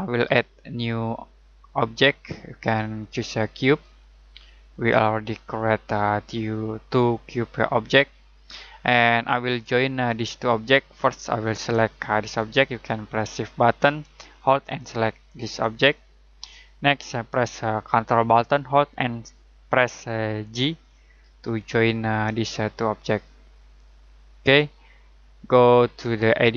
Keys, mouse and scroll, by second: 2.0 click, 7.0 middle click, 14.6 shift+right click, 18.1 ctrl+Num_Lock, 20.6 ctrl+j, 22.4 middle click, 26.4 click.